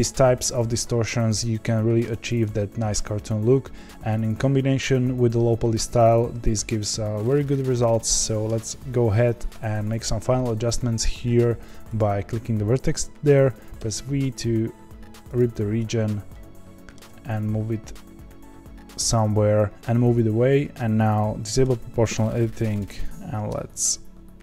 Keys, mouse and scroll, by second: 1.3-3.0 shift+middle drag, 3.0-3.4 scroll up 3, 3.6-8.4 scroll down 1, 8.4 Tab, 11.9 click, 13.7 v, 15.8 click, 16.3 middle click, 17.0 g, 19.7 click, 21.6 o, 22.7 click, 23.5 g.